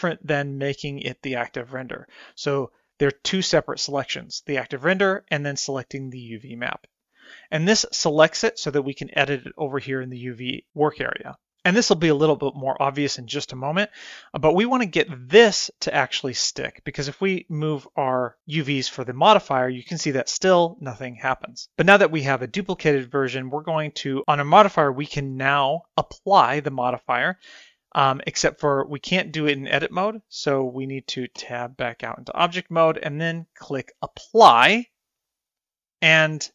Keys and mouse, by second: 1.1 click, 2.1 click, 3.4 click, 4.1 click, 6.0 click, 6.6 click, 7.1 click, 15.5 middle click, 18.4 click, 19.4-20.7 drag, 28.5-30.7 drag, 32.1 Tab, 34.0-35.5 drag.